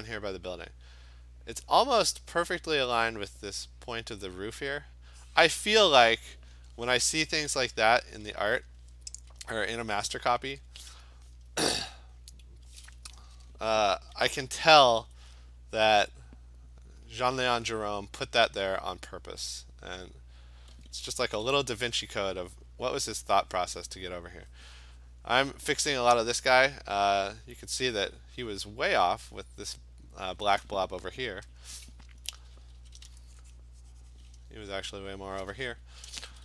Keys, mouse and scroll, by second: 6.1 click, 15.1 alt+click, 16.9 click, 17.4 click, 17.5 alt+click, 17.8 click, 18.2 click, 18.8 click, 19.4 click, 20.0 alt+click, 20.2 click, 20.4 click, 21.2 [, 21.4 [, 22.2 click, 22.6 click, 22.8 click, 31.6 alt+click, 32.3-32.9 typing, 34.1 click, 35.0 alt+click, 35.8-36.4 typing.